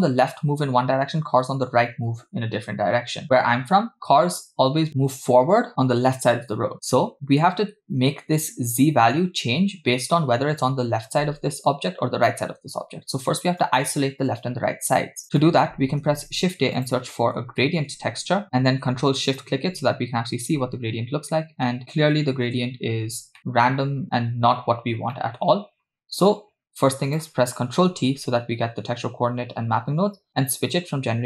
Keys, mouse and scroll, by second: 7.6-8.0 scroll up 2, 8.2-9.6 scroll up 2, 12.8-13.3 scroll down 2, 13.7-14.0 drag, 14.9 click, 15.2 scroll down 2, 15.4 middle click, 16.1 shift+a, 19.5 ctrl+shift+click, 21.2-22.5 scroll up 3, 22.5 KP_0, 23.1 scroll down 1, 23.4 middle click, 25.1 scroll down 1, 25.2 middle click, 25.5-27.1 scroll up 2, 27.1 scroll up 1, 27.1 click, 28.0 ctrl+t, 30.7-31.2 drag.